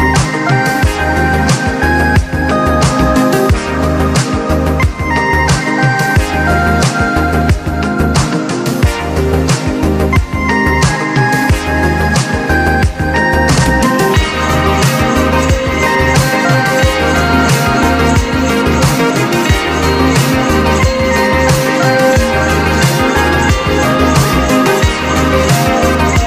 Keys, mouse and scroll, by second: 1.4-3.0 drag, 3.0-5.1 drag, 4.5 typing, 5.1-8.6 drag, 8.7-13.8 drag, 13.8 click, 14.4 scroll up 1, 14.8-16.0 drag, 17.4 click, 18.8 click, 23.3 click, 25.5 click, 25.5 typing.